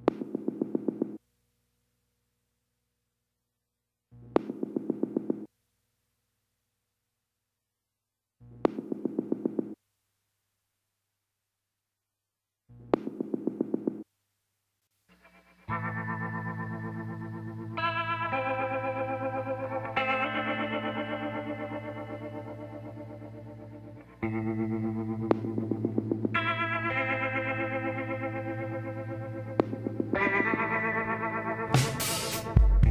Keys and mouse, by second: 0.7-2.6 middle drag, 2.6 e, 8.1 middle click, 8.9-10.1 drag, 8.9 z, 11.7 KP_7, 13.3 e, 15.5 r, 22.1 z, 25.3 l, 25.8 l, 26.4 l, 27.2 l, 28.6 shift+d, 29.5 r.